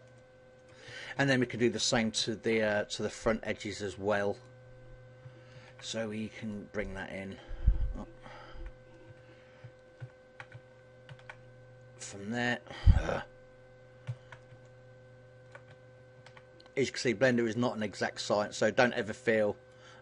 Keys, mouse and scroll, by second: 4.1 click, 5.3 ctrl+r, 8.9 Escape, 9.7 ctrl+z, 11.0 ctrl+r, 13.8 ctrl+z, 14.4 middle click, 15.9 ctrl+r, 19.5 click.